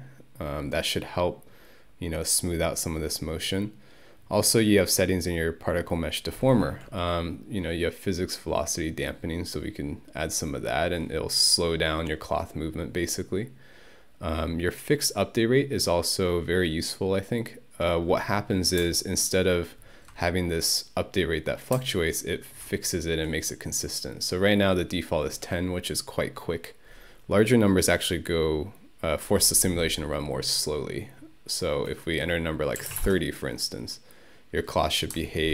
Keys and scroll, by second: 32.6-33.4 typing.